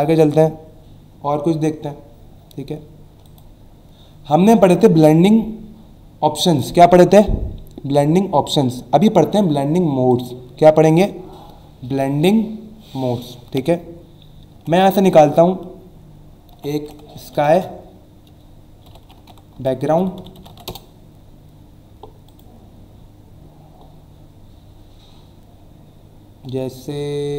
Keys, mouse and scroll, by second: 3.2 click, 10.1 click, 16.5-17.4 typing, 18.6-21.1 typing, 22.3 click, 24.1 scroll down 1, 26.0 scroll down 1.